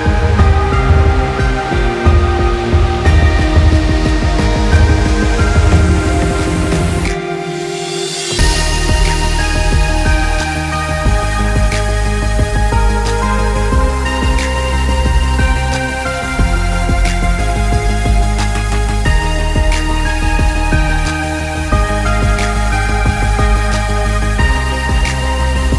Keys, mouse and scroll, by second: 5.3 click, 12.2 click, 17.5 click, 18.5 click, 20.6 click, 23.0 click.